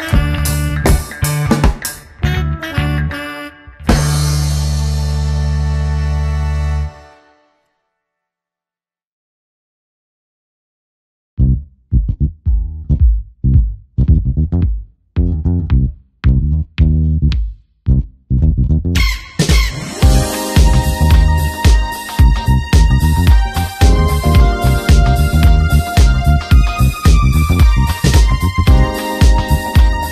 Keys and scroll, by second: 5.9 space, 6.3 w, 10.1 Return, 10.8 shift+F2, 11.5 ctrl+space, 12.1 space, 13.6 Return, 14.3 shift+F2, 14.9 ctrl+KP_Add, 15.3 space, 16.9 space, 19.1 [, 23.9 space, 27.1 w, 28.1 Return, 28.9 ctrl+m, 29.9 Return.